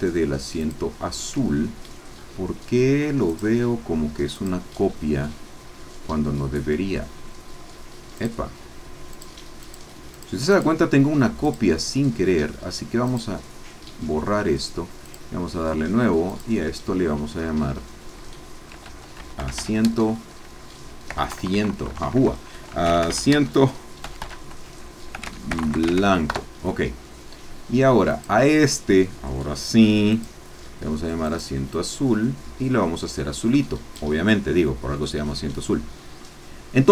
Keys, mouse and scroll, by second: 0.6 click, 2.1-3.1 scroll down 1, 3.3 click, 8.2 click, 9.1 click, 9.6 click, 10.1 click, 10.5 click, 11.5 click, 13.0 click, 15.0 click, 16.3-18.7 drag, 18.7-21.2 typing, 22.8-26.0 typing, 26.3 Return, 28.1 click, 30.1 click, 31.2-35.1 drag, 35.1 scroll down 2.